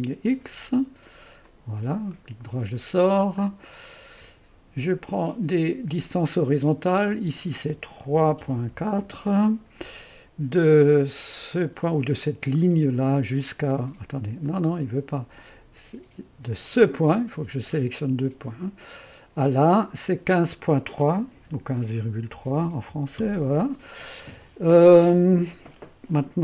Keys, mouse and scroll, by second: 1.5 click, 2.2 middle click, 3.2-3.8 scroll down 2, 3.8-6.0 drag, 7.1 click, 8.0-9.5 typing, 13.1 click, 14.5-15.9 drag, 16.7-19.8 drag, 21.4 KP_1, 22.4 KP_5, 22.7 KP_Decimal, 23.0 KP_3, 23.3 Return.